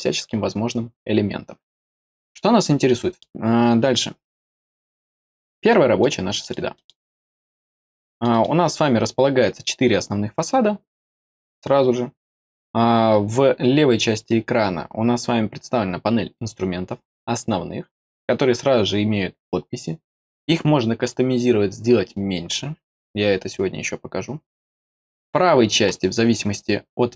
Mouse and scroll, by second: 2.8-3.1 middle drag, 4.7 click, 5.6 middle click, 6.3 middle click, 6.7 middle click, 7.1-7.5 scroll down 3, 8.0 middle click, 8.3 middle click, 27.0 click.